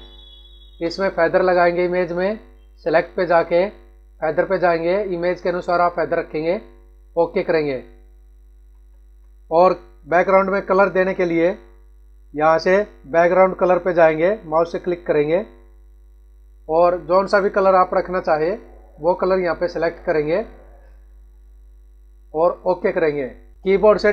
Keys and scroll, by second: 8.5 ctrl+-.